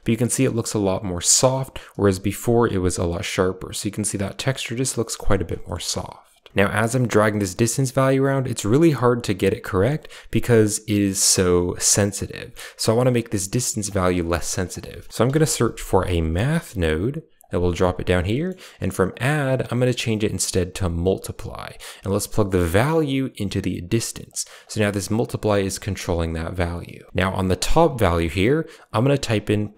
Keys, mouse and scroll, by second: 5.0 middle click, 5.5 middle click, 6.0 click, 6.6-8.0 shift+drag, 8.5-12.2 shift+drag, 12.7 click, 13.7 click, 14.1 middle drag, 14.6 shift+a, 18.2 middle drag, 19.0-21.0 drag, 21.5 click, 22.6-24.2 drag, 24.5 drag, 27.1-29.7 drag.